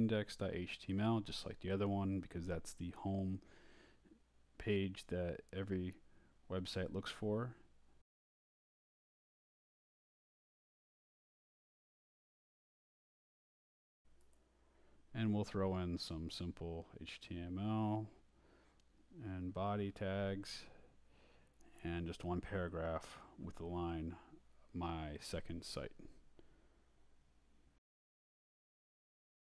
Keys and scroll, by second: 0.0-6.2 typing, 0.2 Return, 6.7 shift+Return, 7.3 shift+,, 9.3 i, 9.7 shift+,, 10.7-15.3 typing, 15.3 shift+Left, 16.8 Return, 17.9 Up, 18.9 shift+Up, 19.0-22.9 typing, 24.3 Return, 24.9 Up, 26.7-29.2 typing.